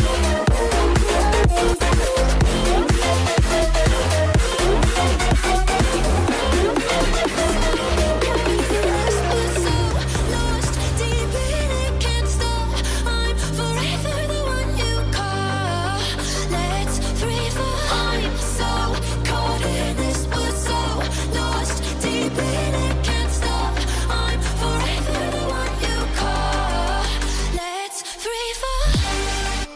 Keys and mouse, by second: 0.0 space, 0.4 KP_3, 17.5 click, 17.5 middle click, 18.2 g, 19.0 g, 20.3 g, 22.0 g, 22.6 r, 24.2 r, 27.0 r.